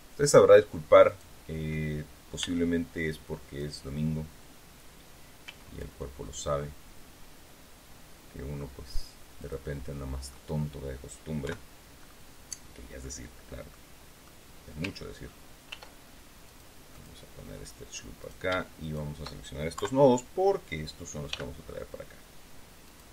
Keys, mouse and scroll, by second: 1.0 right click, 2.3 b, 3.0 click, 5.3 g, 9.3 click, 9.7 middle click, 10.4 click, 11.3 KP_3, 11.9-12.3 scroll up 1, 13.6 click, 15.6 ctrl+r, 16.4 click, 16.8 click, 18.1 right click, 18.7 shift+right click, 21.2 g, 22.8 click.